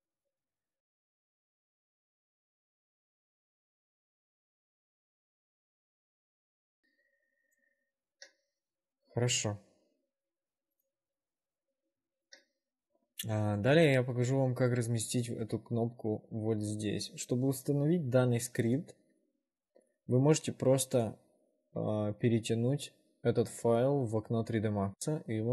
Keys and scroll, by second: 0.4 r, 6.2 shift+5, 15.6 w.